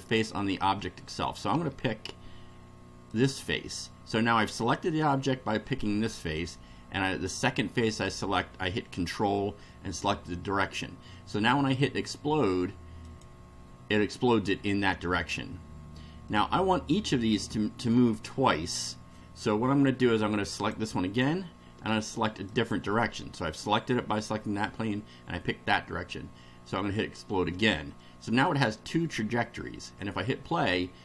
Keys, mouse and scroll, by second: 3.1 ctrl+click, 13.1 click, 16.2-18.1 middle drag, 20.6 click, 22.5 ctrl+click, 27.0 click, 27.9-28.6 middle drag.